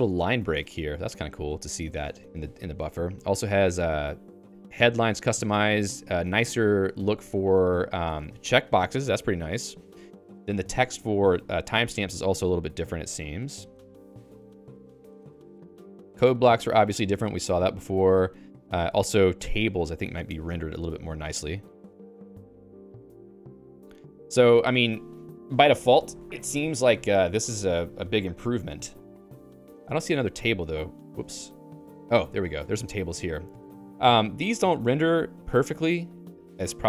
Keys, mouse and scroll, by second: 0.0-7.8 typing, 0.7 Escape, 8.0 Escape, 9.9-20.5 typing, 27.7 Escape, 29.1 Escape, 29.8 ctrl+u, 31.3-33.8 typing, 35.7 click, 36.3 click.